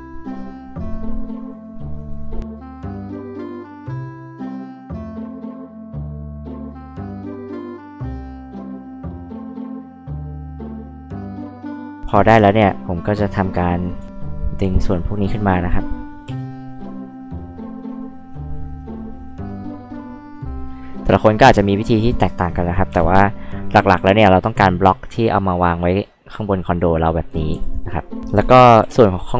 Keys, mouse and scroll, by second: 2.8 click, 3.4-3.8 scroll down 2, 5.6 l, 5.8 click, 6.9 click, 7.5 click, 8.0 click, 8.2 e, 8.4 click, 9.3 click, 9.5 scroll up 2, 9.8 click, 10.2 ctrl+z, 10.7 click, 12.0 scroll up 2, 12.3 scroll down 2, 12.5 click, 14.0 click, 14.8 click, 16.3 e, 16.4 click, 16.9 scroll up 2, 17.0 click, 17.8 click, 18.3 click, 19.0 click, 19.5 click, 23.2-24.3 drag, 25.2 click, 27.5 g, 28.8 p, 29.1 click.